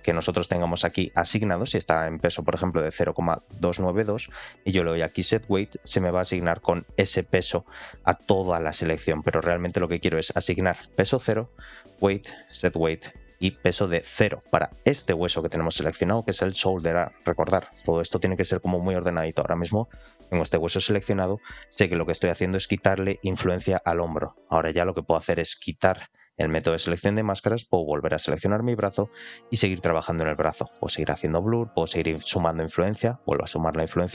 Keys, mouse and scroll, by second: 0.9-2.7 drag, 4.2-6.1 drag, 9.8-10.8 drag, 11.6-13.7 drag, 14.3 middle click, 14.7 shift+middle click, 26.4 click, 27.3 shift+middle click, 28.3 ctrl+click, 28.8 middle click, 30.6 click, 31.0 middle click, 32.2 click, 33.1 click.